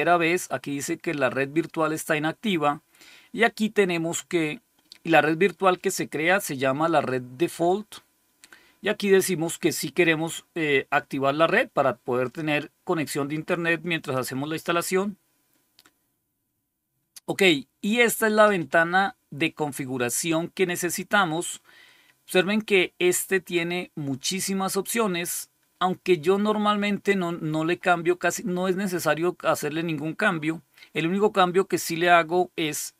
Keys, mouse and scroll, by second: 12.1 click, 13.9 click.